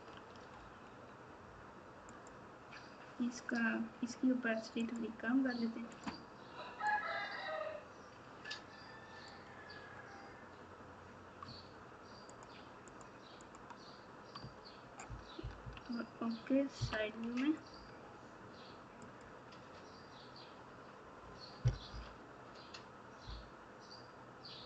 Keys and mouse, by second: 2.1 click, 4.8 click, 5.9 click, 6.8-9.2 drag, 11.4 Tab, 12.3 click, 13.5 click, 15.6 KP_1, 16.7 KP_3, 21.9 KP_4, 23.2 KP_4.